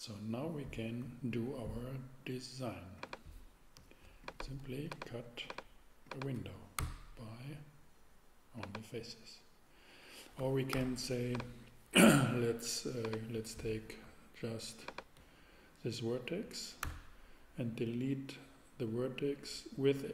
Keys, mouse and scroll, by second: 6.8 x, 10.7 super+z, 11.3 z, 16.8 super+x.